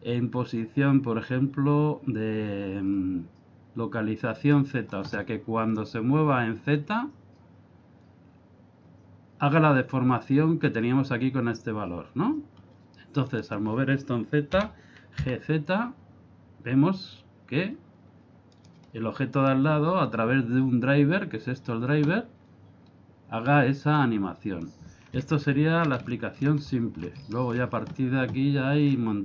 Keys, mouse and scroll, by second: 10.7-12.6 scroll down 2, 12.6 scroll up 1, 13.3 right click, 14.5 g, 19.4 right click, 24.0 click, 25.4 ctrl+middle click, 26.1 shift+middle click, 26.8 ctrl+middle click, 27.3 shift+middle click, 28.8-29.1 scroll down 2.